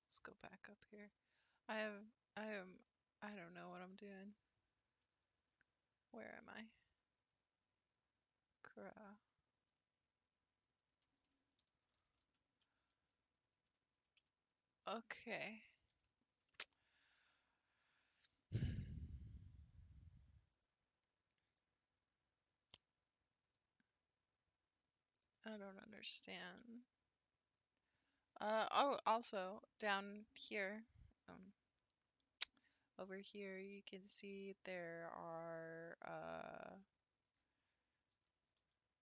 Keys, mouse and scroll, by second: 1.0 click, 1.9 click, 2.9 click, 4.3 click, 5.1 click, 6.2 click, 7.2 click, 9.1-12.3 drag, 13.9 Left, 14.5 Left, 19.5 click, 20.5 click, 21.5 click, 23.4-25.2 drag, 27.0 Tab, 38.7 g.